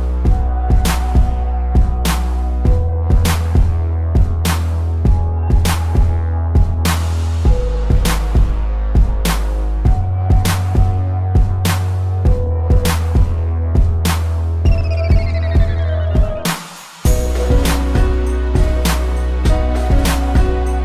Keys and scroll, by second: 0.5 space, 1.6 space, 5.8 space, 9.3 ctrl+-, 10.2 space, 12.9 ctrl+=, 13.2 space, 16.2 space.